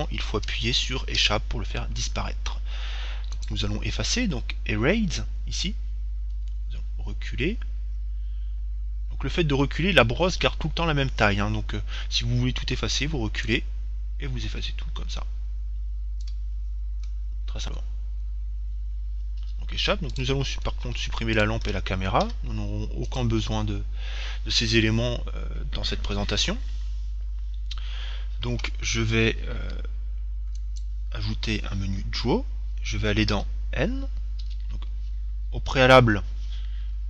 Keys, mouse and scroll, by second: 3.7-5.6 drag, 5.8-10.0 middle drag, 9.2-10.0 scroll up 1, 10.0-11.3 scroll up 1, 11.3-12.6 middle drag, 12.6-13.7 scroll down 1, 13.7-14.8 scroll down 1, 16.9-20.2 middle drag, 20.5-23.5 right drag, 22.7 x, 31.0-32.7 drag, 33.7 n.